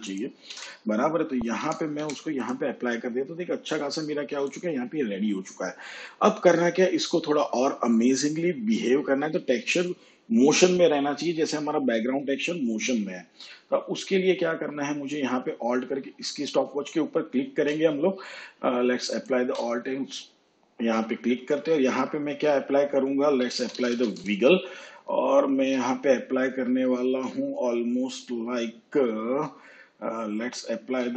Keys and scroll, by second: 0.4 1, 1.5 5, 1.9 0, 23.3-24.1 typing, 25.4 shift+9, 30.8 1.